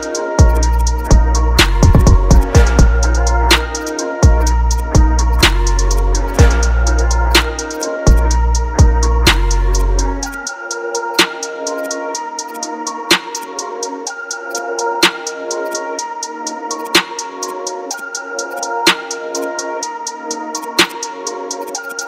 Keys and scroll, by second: 16.1 ctrl+d.